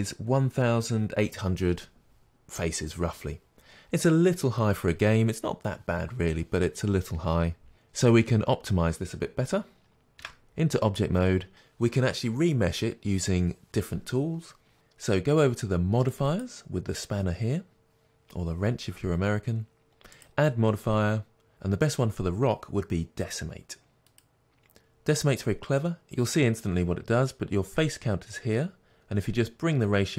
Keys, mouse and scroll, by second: 12.3 Tab, 24.1-30.1 drag.